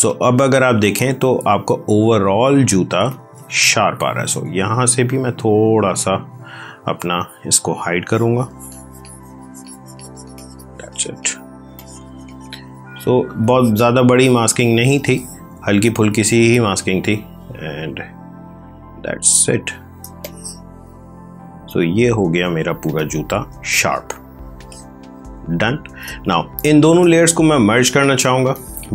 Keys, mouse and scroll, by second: 0.0 ctrl+click, 0.1 ctrl+space, 1.9 space, 3.0 click, 4.3-5.7 typing, 7.0 x, 7.5 click, 11.6 click, 14.8 space, 15.0 click, 15.4 space, 16.0 click, 19.9 space, 20.1 click, 20.4 space, 22.9 click, 23.0 space, 23.6 click, 23.8 space, 24.5 click, 24.6 space, 27.5 click, 27.6 space, 28.4 ctrl+click.